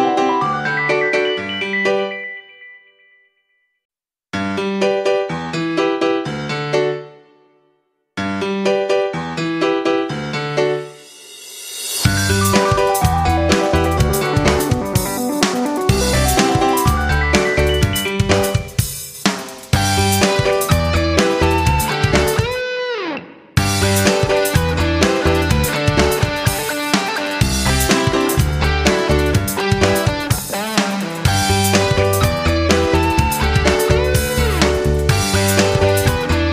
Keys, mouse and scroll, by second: 10.5 F9, 13.4 F9, 13.8-31.0 drag, 32.5 click, 34.6 shift+click, 35.8 click.